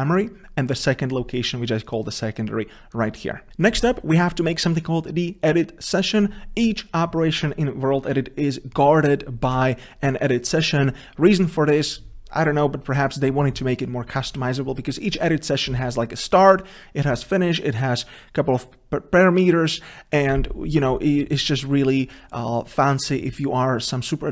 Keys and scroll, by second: 3.5 ctrl+v.